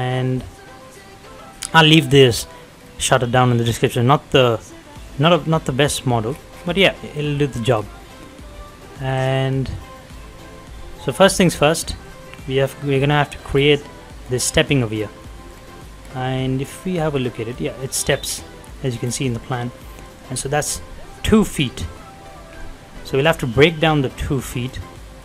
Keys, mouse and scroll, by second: 2.6 middle click, 2.7 scroll down 1, 3.1 middle click, 3.8-4.6 scroll up 1, 4.6 shift+middle click, 5.0-5.3 shift+scroll up 2, 5.6 middle click, 6.1 scroll down 1, 7.0 middle click, 7.3 shift+middle click, 7.7 scroll down 1, 7.9 middle click, 9.2 click, 10.8-11.2 scroll up 1, 11.2 middle click, 11.3 middle click, 13.1 scroll up 1, 14.1-14.4 scroll down 1, 15.2 middle click, 15.4-15.8 scroll down 1, 16.2-17.8 middle drag, 17.8-18.7 scroll up 1, 19.0-19.3 scroll down 1, 19.3 middle click, 20.1-21.4 scroll up 1, 21.4-21.7 scroll down 1, 21.7 middle click, 24.1 click, 24.5 scroll down 1, 25.0 middle click, 25.0 middle click.